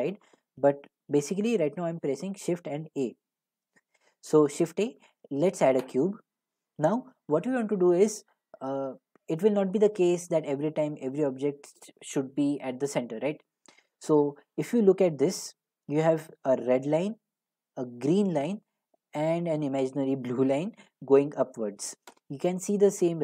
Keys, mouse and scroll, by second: 0.3-0.7 drag, 2.6 a, 5.9-10.9 drag.